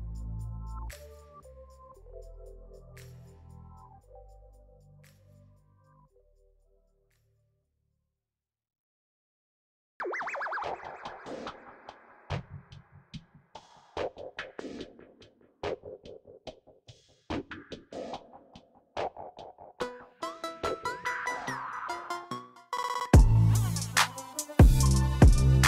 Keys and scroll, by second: 4.9 shift+z, 7.2 ctrl+r, 12.3 ctrl+b, 19.7 Tab.